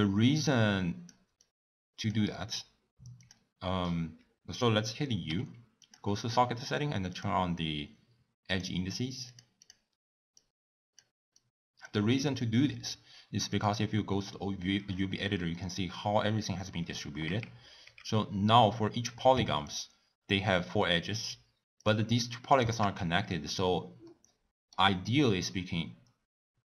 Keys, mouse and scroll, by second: 0.5 click, 1.4 click, 3.2 click, 5.2 u, 10.4-11.5 drag, 13.5 click, 17.2 Tab, 17.8 Tab, 19.7 click, 21.9 click.